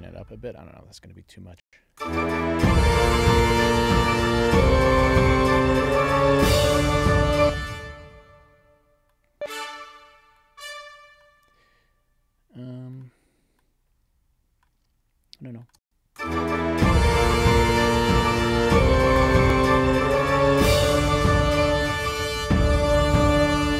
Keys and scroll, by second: 1.5 space, 7.2 space, 15.7 space.